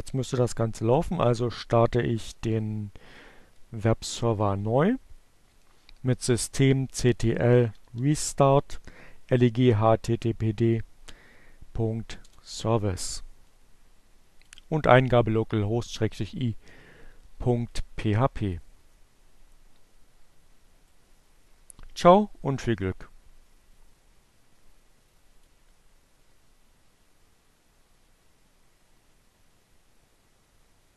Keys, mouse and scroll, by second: 6.2 r, 6.5 e, 10.4 Return, 12.9 click, 15.5-16.7 right drag, 17.0 click, 19.6-24.6 drag.